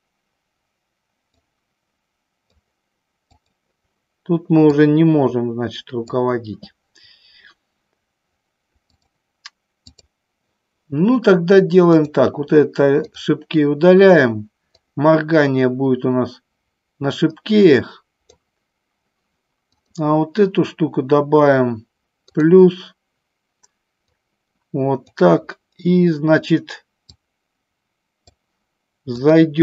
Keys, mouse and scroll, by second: 1.5-2.6 drag, 3.5 click, 4.8-6.2 drag, 9.1-10.2 drag, 12.0 click, 14.8-18.4 drag, 19.7 click, 22.2 click, 24.1 click, 27.3-28.5 drag, 29.4-29.6 drag.